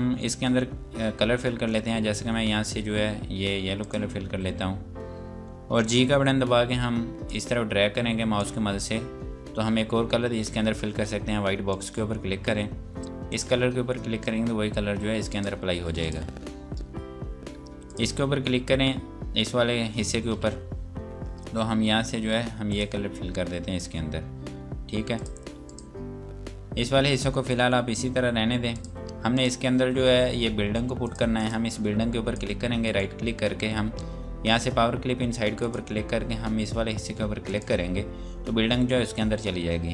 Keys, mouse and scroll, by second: 3.8 click, 6.3 g, 7.3 click, 11.4 click, 22.6 click, 28.7 click, 30.5 scroll down 1, 31.0 click, 32.9 right click, 35.4 click.